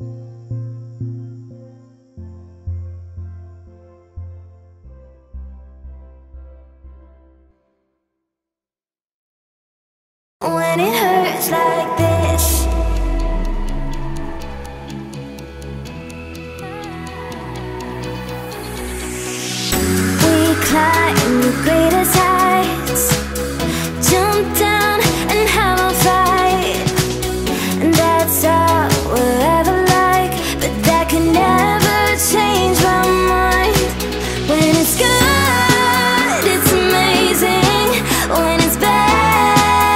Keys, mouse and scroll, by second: 0.5 click, 0.8 s, 1.6 click, 2.7 click, 2.8 s, 4.3 click, 4.6 shift+click, 4.9 f, 5.4 ctrl+z, 5.5 right click, 6.2 click, 6.4 scroll, 6.4-6.9 scroll up 1, 6.9 scroll up 1, 6.9 click, 7.4 click, 8.8 click, 9.0 click, 10.1 click, 10.2 click, 11.4 shift+middle click, 12.4 e, 13.9 scroll up 3, 14.1 shift+middle click, 14.6-16.2 drag, 16.2 e, 17.3 e, 18.0 e, 19.0 r, 19.2 scroll down 1, 19.5 shift+middle click, 19.7 e, 20.7-23.2 drag, 23.2 e, 24.6 click, 24.7 s, 25.5 scroll up 2, 25.7 shift+middle click, 26.2 click, 26.4 e, 27.8 r, 28.8 click, 29.2 click, 29.7 s, 30.1 click, 30.2 click, 31.2 click, 31.4 click, 31.9 e, 33.3 click, 34.0 e, 34.6 r, 35.3 scroll down 1, 35.4 shift+middle click, 35.9 e, 36.5 r, 38.2 e, 39.4 shift+middle click, 39.8 e.